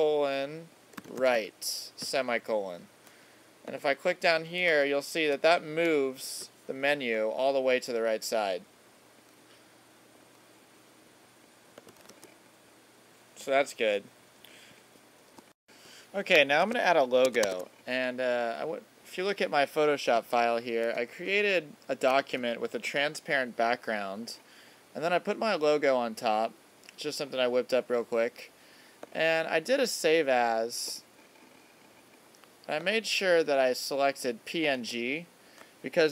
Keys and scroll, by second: 5.0 alt+super+-, 12.0 super+s, 16.6 super+Tab, 20.9 super+=.